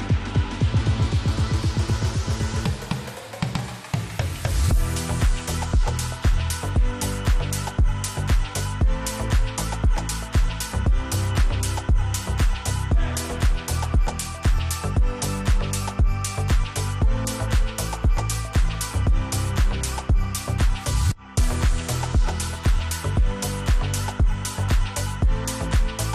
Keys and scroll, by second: 7.1 space, 11.1 Escape, 17.0 Escape, 20.6 F3, 24.1 Escape, 24.7 ctrl+r.